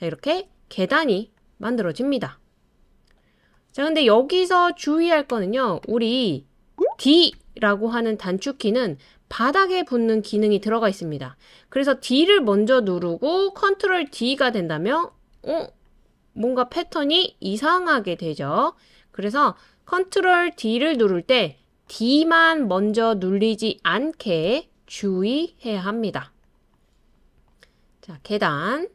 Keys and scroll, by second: 0.4 super+d, 14.1 super+d, 15.4 super+d, 17.8 super+d, 24.4 BackSpace.